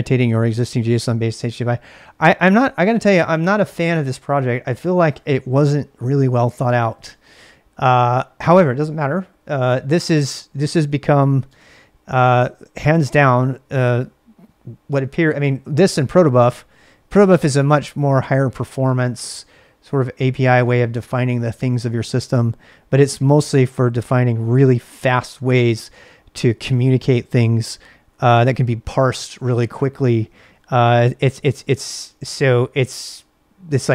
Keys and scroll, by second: 2.5 l, 11.5 space, 13.0 k, 22.3 j, 23.2 k.